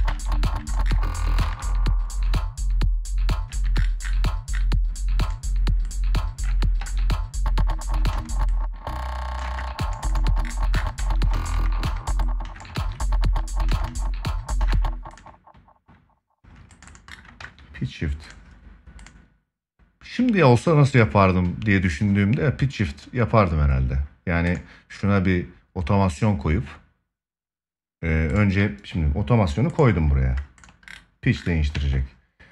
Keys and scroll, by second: 1.1 ctrl+s, 6.5 ctrl+s, 7.9 space, 9.2 space, 10.7 ctrl+s, 17.1 ctrl+s, 31.4 ctrl+s.